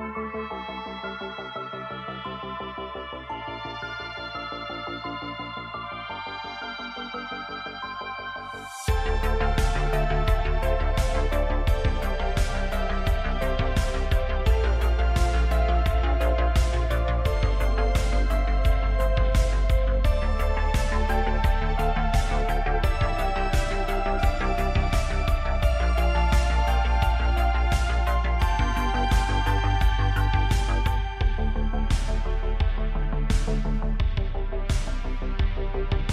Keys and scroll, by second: 0.6 s, 11.2 KP_0, 27.6 s, 34.5 n.